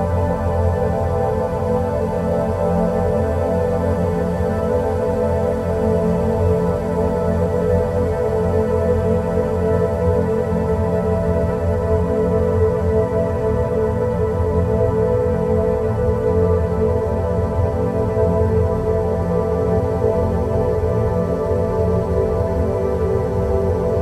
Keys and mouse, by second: 0.6-2.0 shift+drag, 3.2 click, 5.3 g, 17.3 Tab, 17.8-18.5 middle drag, 19.9 click, 21.0-23.3 middle drag.